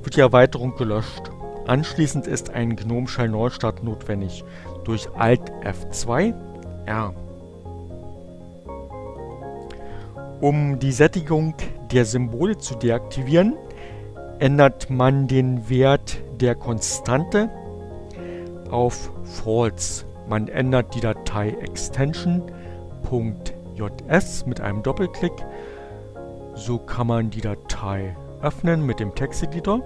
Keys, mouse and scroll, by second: 8.2 click, 19.2 click, 24.2 right click, 28.0 click, 29.3 click.